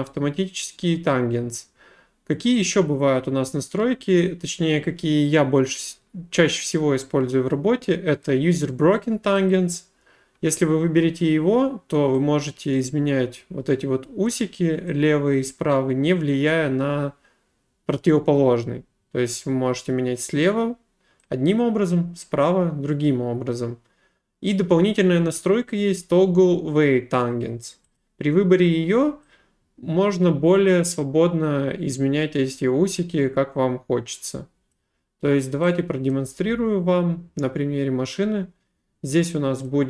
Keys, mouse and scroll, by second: 9.5 click, 14.3 click, 20.4 click, 24.5 click, 28.0 click, 34.7 click, 36.1 right click, 39.7 click.